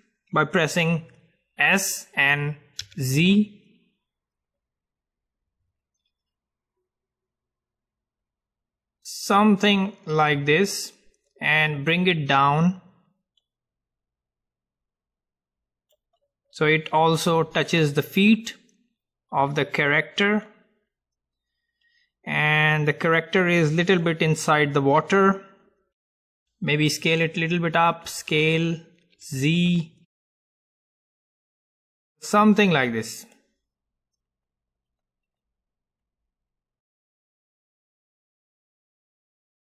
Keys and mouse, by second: 1.9 s, 10.2-11.8 middle drag, 11.8-16.3 drag, 16.3-19.5 middle drag, 19.5 middle click, 20.3 middle click, 20.6-22.7 drag, 25.1-26.7 middle drag, 28.3 s, 33.5-35.7 drag, 37.6-39.7 middle drag.